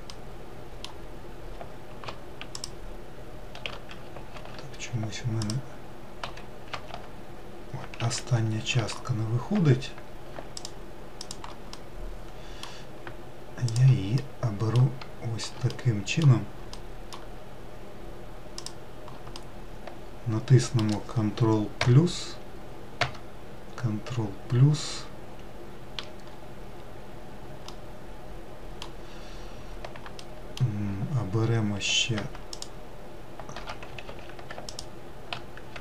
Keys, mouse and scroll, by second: 1.9 alt+shift+click, 3.7 ctrl+z, 4.8 alt+click, 6.1 alt+z, 7.3 alt+z, 8.1 ctrl+z, 10.0 shift+click, 11.1-13.0 middle drag, 13.0 shift+click, 13.5-17.9 middle drag, 17.9 shift+click, 18.7-21.2 middle drag, 21.2 ctrl+KP_Add, 22.4 ctrl+KP_Add, 27.0-31.9 middle drag, 31.9 alt+shift+click, 33.4 ctrl+z, 34.0 alt+click, 35.3 ctrl+z.